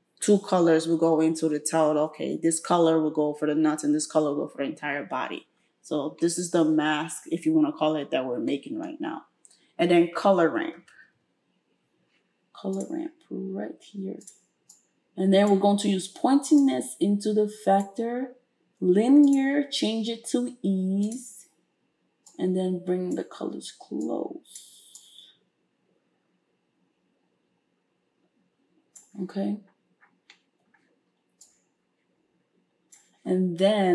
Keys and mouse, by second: 10.1 space, 14.7-33.9 drag.